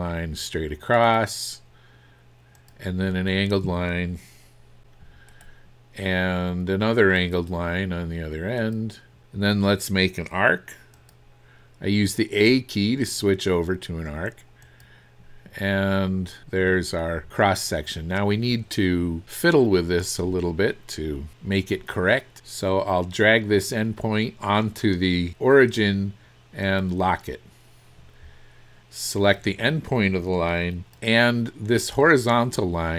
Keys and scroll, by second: 16.6 Escape.